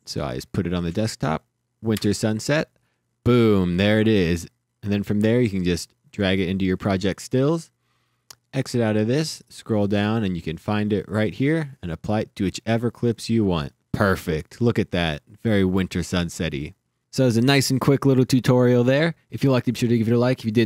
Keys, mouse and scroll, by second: 1.9 KP_Enter, 5.8 click, 8.8 click, 9.6-10.0 scroll down 1, 10.0 scroll up 1, 10.5-11.0 scroll down 1, 11.0 click.